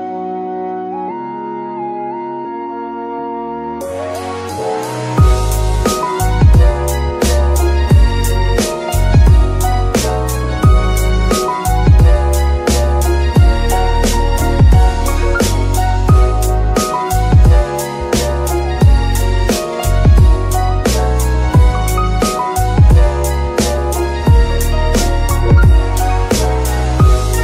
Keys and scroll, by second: 2.6 g, 2.8 y, 5.7 Escape, 9.8 g, 10.3 Escape, 12.9 KP_Decimal, 14.3 g, 14.7 Escape, 15.3 g, 15.9 Escape, 17.7 g, 17.8 z, 19.2 g, 19.3 z, 20.2 g, 20.7 Escape, 21.1 g, 22.0 alt+g, 27.0 g.